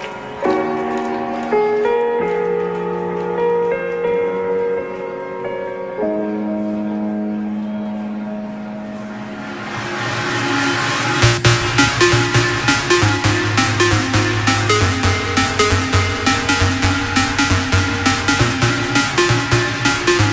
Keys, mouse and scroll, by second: 9.8 Return, 11.3 click, 13.3-15.3 typing, 16.1-20.1 drag.